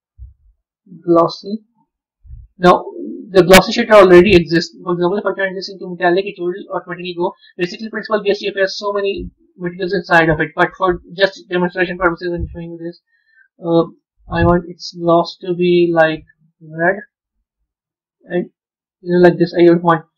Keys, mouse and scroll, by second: 1.2 shift+a, 5.3-12.4 drag, 16.3 click, 18.2-20.1 drag.